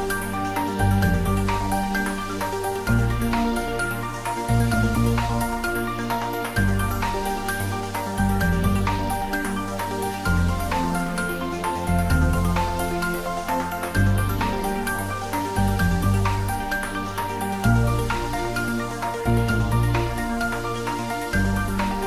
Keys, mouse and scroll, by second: 4.5 alt+shift+click, 9.2 alt+shift+click, 13.4 scroll down 1, 14.1 middle click, 14.9 scroll up 1, 17.5 alt+shift+click, 21.4 ctrl+z.